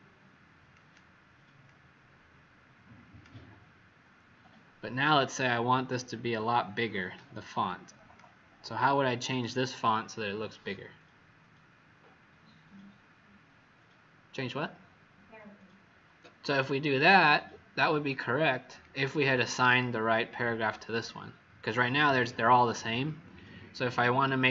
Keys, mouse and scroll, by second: 5.3 alt+scroll down 1, 7.1 click, 21.7-22.5 scroll down 2.